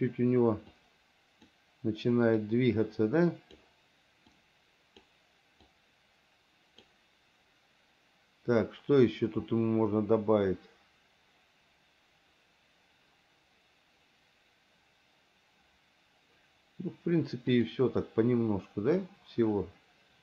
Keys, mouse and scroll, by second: 0.9 click, 2.6-3.8 drag, 4.5 click, 5.9-7.1 drag, 17.8 click, 19.3-20.2 drag.